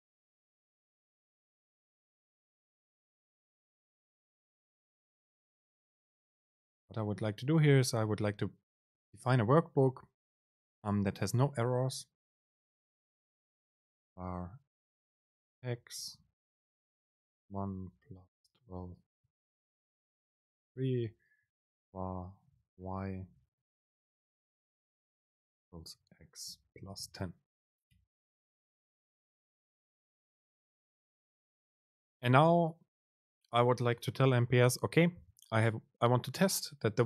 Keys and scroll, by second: 6.7 Down, 20.5 Return, 23.2 BackSpace, 24.7 Right, 25.8 BackSpace, 31.1 Up.